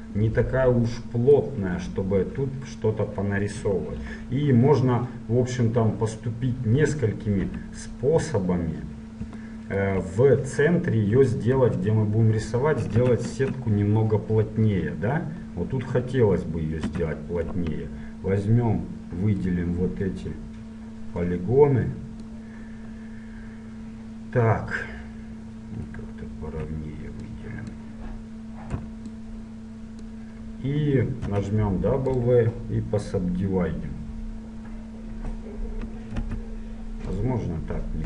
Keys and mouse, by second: 7.5 Tab, 9.6-10.9 middle drag, 11.7 KP_1, 13.1 z, 13.5 Tab, 17.1 a, 17.7 b, 27.3-29.3 drag, 28.8 b, 31.5 w, 36.3 w.